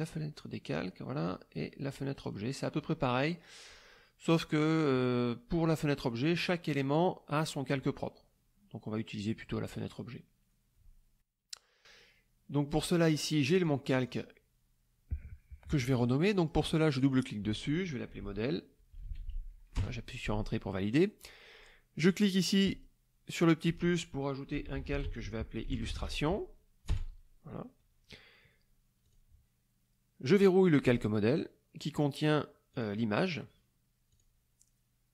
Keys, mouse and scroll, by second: 2.2 click, 13.1 click, 13.5 click, 13.9 click, 16.4 click, 16.9 click, 18.1-19.8 typing, 22.7 click, 24.3-26.5 typing, 26.9 Return, 29.0 click, 30.8 click, 32.2 click, 32.7 click, 34.1 click.